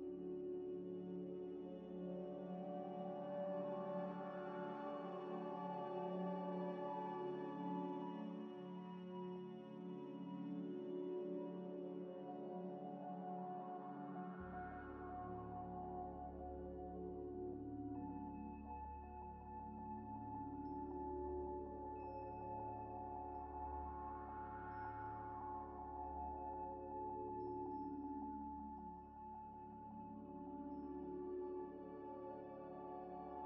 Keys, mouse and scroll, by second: 0.6 shift+click, 0.7 shift+click, 1.1-1.9 typing, 3.0 3, 3.8 double click, 4.8 alt+shift+click, 5.6 alt+shift+click, 6.9 alt+shift+click, 7.6 alt+shift+click, 10.3 middle click, 10.7 scroll down 1, 11.7-12.9 typing, 13.8 ctrl+z, 16.1-16.6 scroll up 2, 17.2 alt+click, 17.8 ctrl+y, 17.9 ctrl+z, 19.0 Tab, 19.2 ئ, 19.5 scroll down 1, 20.0 ctrl+ئ, 20.1 ctrl+ئ, 20.2 ctrl+ئ, 20.3 ctrl+z, 20.4 ctrl+z, 20.5 ctrl+z, 21.1 scroll up 1, 21.6 z, 21.8 Tab, 22.2 ئ, 22.7 ئ, 23.3 ذ, 23.9 scroll up 1, 24.3 3, 24.7 ctrl+ئ, 26.1 double click, 26.7 Tab, 27.0 3, 27.6 shift+click, 28.3 shift+click, 28.4 shift+click, 29.0 shift+click, 29.0 shift+click, 31.0 double click, 31.6 middle click, 32.0 scroll down 1, 32.3 middle click, 32.8-33.4 typing.